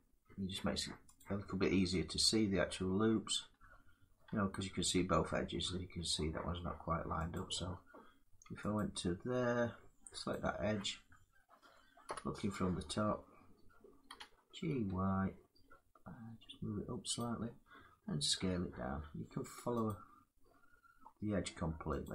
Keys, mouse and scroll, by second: 1.1 click, 2.7 middle click, 3.2 middle click, 3.3 scroll, 7.0 click, 8.4 alt+click, 10.0 click, 11.7 7, 13.7 g, 14.4 y, 16.9 click, 17.9 s, 19.6 click, 21.9 click.